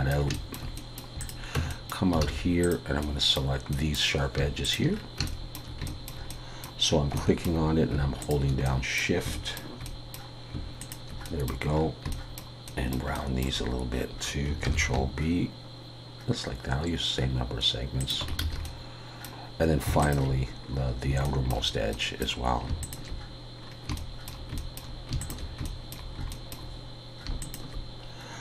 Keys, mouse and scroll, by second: 0.3 shift+middle click, 0.8 middle click, 1.2 click, 1.6 Tab, 1.7 middle click, 2.2 alt+a, 2.6 click, 3.0 middle click, 4.6 shift+click, 4.9-5.3 scroll down 3, 5.3 shift+middle click, 5.5 shift+middle click, 6.3 middle click, 6.9-7.2 scroll up 3, 7.2 shift+middle click, 8.2 shift+click, 8.6 middle click, 9.3 shift+middle click, 9.8 middle click, 10.8 shift+click, 11.2 middle click, 11.7-12.1 scroll down 3, 12.1 shift+middle click, 12.5 shift+scroll up 1, 12.7 shift+middle click, 13.1 shift+middle click, 13.7 scroll up 1, 14.3 scroll up 1, 14.7 ctrl+b, 18.4 alt+a, 18.6 middle click, 20.0 alt+shift+click, 20.7 scroll up 3, 21.2 shift+middle click, 21.9 middle click, 22.8 alt+shift+click, 23.6 scroll down 3, 24.0 shift+middle click, 25.2 alt+shift+click, 25.6 shift+middle click, 27.4 alt+shift+click.